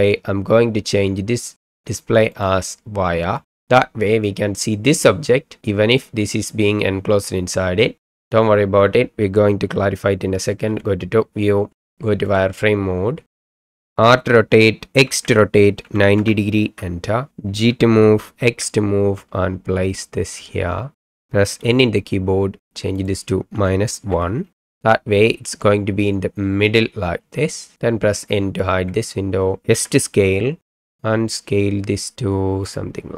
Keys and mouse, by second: 2.4-3.5 drag, 10.7 KP_7, 12.3 click, 13.5 shift+middle click, 14.0 r, 15.0 x, 15.8 KP_9, 16.2 KP_0, 16.6 KP_Enter, 17.7 g, 18.5 x, 21.6 n, 23.1-24.6 drag, 28.8 n, 29.7 s.